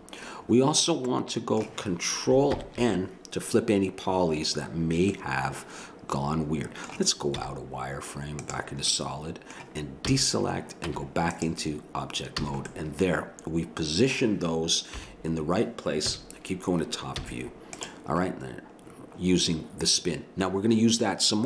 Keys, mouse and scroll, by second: 0.6-2.5 middle drag, 2.5 ctrl+n, 5.2-6.4 middle drag, 7.4 z, 10.1 a, 10.9 Tab, 12.4 a, 12.7-14.9 middle drag, 14.9 KP_7, 16.1 KP_1, 17.2 z.